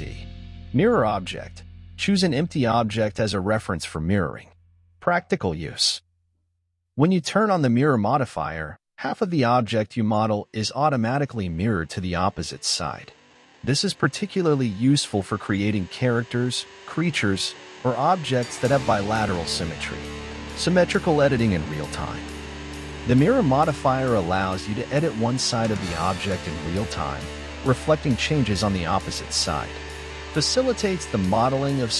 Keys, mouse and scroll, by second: 1.0 z, 2.4 shift+middle click, 3.1-4.0 scroll up 8, 4.0-7.3 shift+middle drag, 7.4-10.7 drag, 13.7-15.5 scroll down 4, 15.5 click, 16.0-16.4 scroll down 1, 16.4-19.8 middle drag, 19.8 click, 20.2-20.6 scroll down 11, 21.0 middle click, 21.6-22.1 scroll up 1, 22.1 shift+middle click, 22.7-23.1 scroll up 5, 23.1-25.7 middle drag, 25.7 click, 27.2 click, 28.1 click, 28.5-29.4 scroll down 9, 29.4-30.8 scroll up 4, 30.8-31.9 drag.